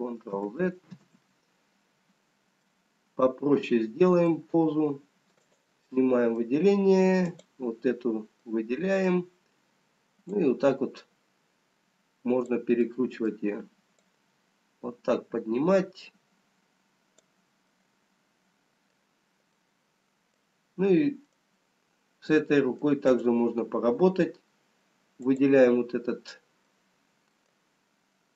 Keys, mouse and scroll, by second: 0.1 ctrl+z, 1.1 ctrl+z, 2.0 ctrl+z, 2.5 middle click, 5.4 click, 5.9 middle click, 7.2 click, 10.2 click, 13.7 middle click, 15.0 click, 17.9 middle click, 19.5 middle click, 22.0 middle click, 22.0-23.4 scroll up 1, 23.4 middle click, 23.4 click, 25.6 click.